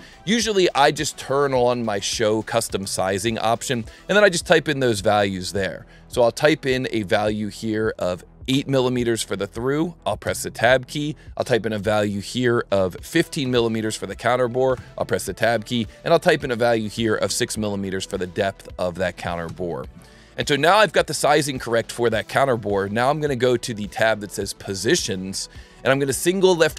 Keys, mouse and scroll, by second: 0.6-2.0 drag, 5.1 click, 10.2 Tab, 14.7 Tab, 19.4 Tab, 24.8 click.